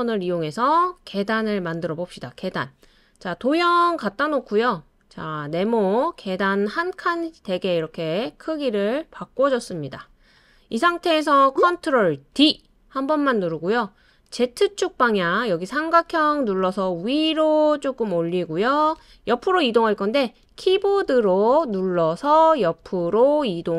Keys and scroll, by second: 12.3 super+d, 20.4 Right, 20.8 Right, 21.0 Right, 21.3 Tab, 21.5 Right, 21.7 Right.